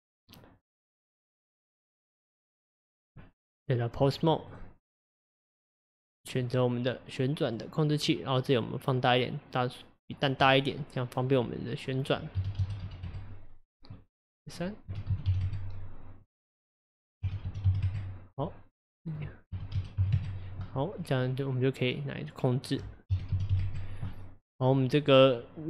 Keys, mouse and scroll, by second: 0.7 click, 1.2 click, 1.8 click, 2.3 click, 3.2 Tab, 4.5 click, 5.0 click, 6.4 click, 8.8-10.5 drag, 10.5-12.0 middle drag, 12.0-21.1 drag, 21.1-22.7 middle drag, 22.7-25.2 drag.